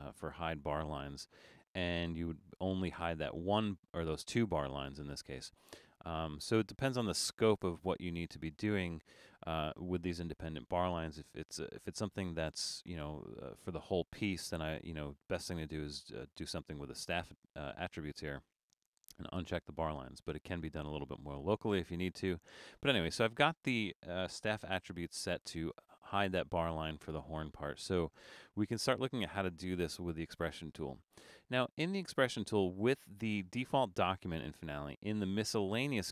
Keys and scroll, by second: 7.7 super+z, 24.8 super+=.